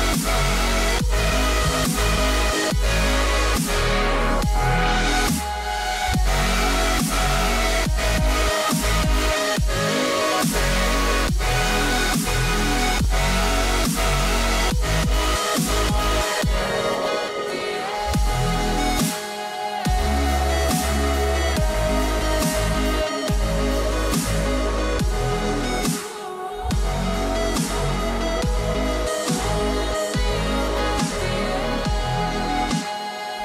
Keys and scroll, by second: 32.3 q.